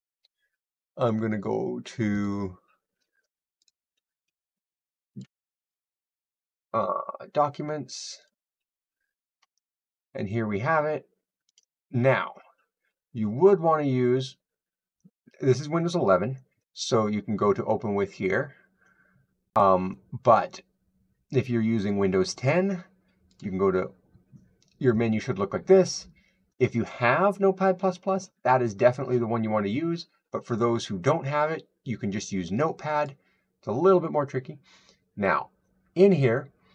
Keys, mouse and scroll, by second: 2.1 click, 3.7 click, 5.0 click, 8.1 click, 9.4-9.7 scroll, 10.1-10.7 scroll, 10.7 scroll, 11.4 right click, 16.4 right drag, 23.2 click, 32.9-36.7 drag.